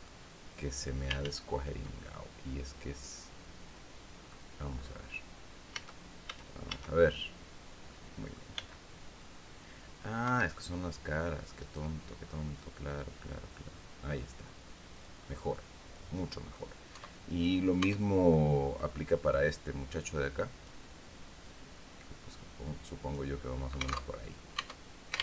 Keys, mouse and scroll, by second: 0.7 ctrl+z, 1.5-4.0 ctrl+drag, 4.3-4.8 scroll up 1, 5.2 a, 7.4 click, 8.1 b, 9.7 Escape, 11.1 right click, 12.0-14.7 drag, 15.0-16.2 middle drag, 16.4 Tab, 16.8 right click, 17.3 Tab, 17.8 right click, 18.8-20.3 drag, 20.9-22.8 drag, 22.9 scroll down 1, 23.6 alt+Tab.